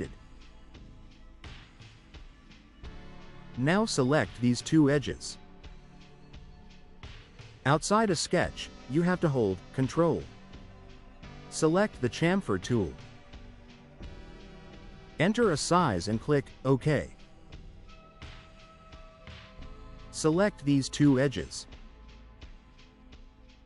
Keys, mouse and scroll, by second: 0.4 middle click, 0.4 scroll down 1, 2.4 click, 3.4-4.5 drag, 6.1 ctrl+click, 12.8 click, 16.7 click, 20.6 click, 21.0-22.0 drag, 23.4 ctrl+click.